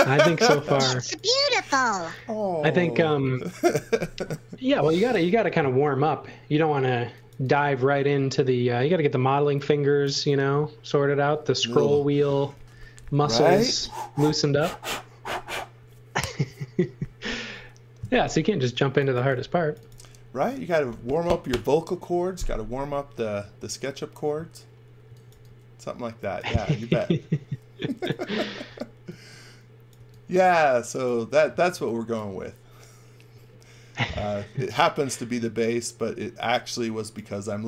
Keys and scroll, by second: 0.2 x, 0.6 v, 1.4 x, 1.7 v, 7.0 x, 7.3 v, 18.8 x, 19.1 v, 24.8-25.8 typing, 27.7 x, 29.9 v, 31.7 x, 36.3 x, 37.4 v.